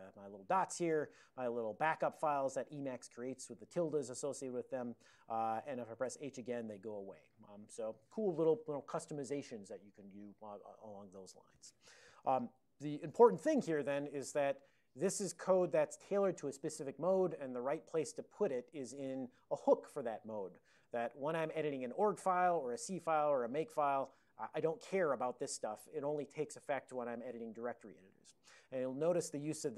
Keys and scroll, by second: 1.0 ctrl+n, 1.5 ctrl+n, 1.6 ctrl+n, 1.8 ctrl+n, 2.1 ctrl+e, 3.1 ctrl+b, 3.5 ctrl+f, 12.7 super+j.